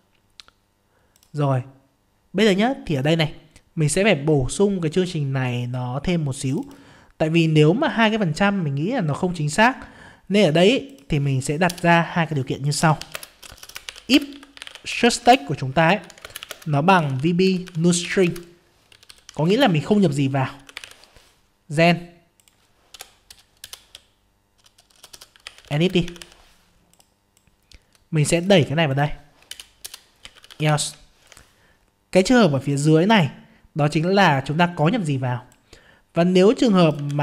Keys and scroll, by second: 15.2 ctrl+space, 18.2 ctrl+space, 37.0 ctrl+c.